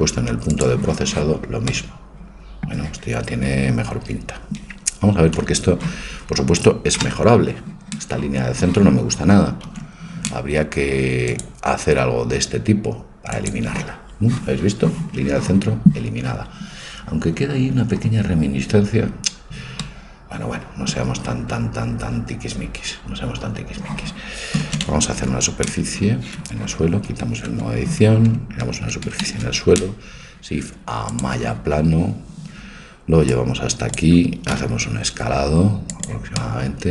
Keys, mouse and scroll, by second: 7.0 KP_0, 9.7 ctrl+r, 16.7-18.8 middle drag, 19.8-23.9 middle drag, 25.2 ctrl+a, 26.5 Escape, 27.5 Tab, 29.3 shift+a, 33.3 click, 34.5 click, 34.5 s, 34.8 click, 36.4-36.9 middle drag.